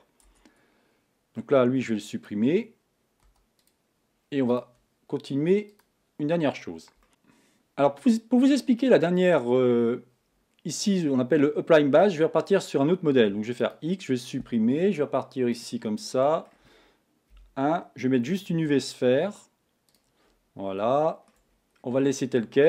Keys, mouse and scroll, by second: 0.9 Tab, 1.3 middle click, 2.3 click, 3.8 x, 4.6 click, 6.1-7.1 drag, 8.0-13.9 middle drag, 13.9 x, 15.5 click, 16.1-17.3 middle drag, 17.3 KP_1, 19.9 shift+a, 20.9 shift+middle click, 21.5-22.0 scroll up 3, 22.0-22.6 shift+middle drag.